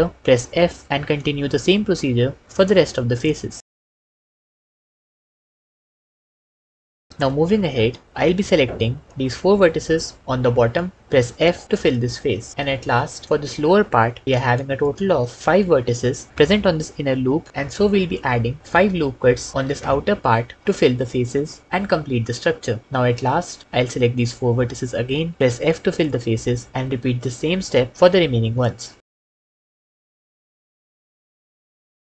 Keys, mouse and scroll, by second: 0.5 f, 3.2-6.1 typing, 5.0 shift+click, 5.6 click, 6.7 ctrl+f, 6.8 ctrl+s, 11.1 f, 14.6 shift+click, 18.7 ctrl+r, 19.5 s, 20.0 5, 20.6 Return, 20.6 Return, 25.8 f, 27.0 shift+click, 28.8 f, 29.8 f, 31.0 f, 31.5 shift+click.